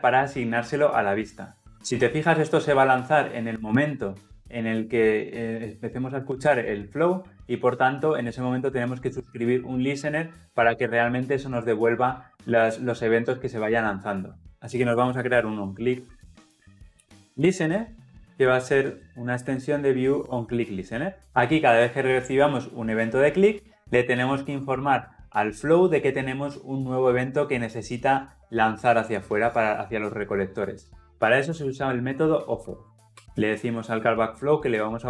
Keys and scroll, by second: 20.3 Return, 33.1 Return.